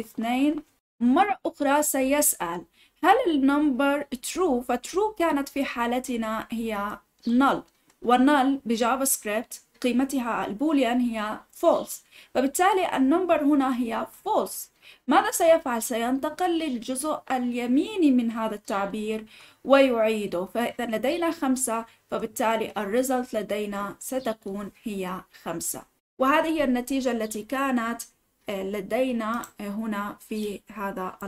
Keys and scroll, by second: 29.1 typing.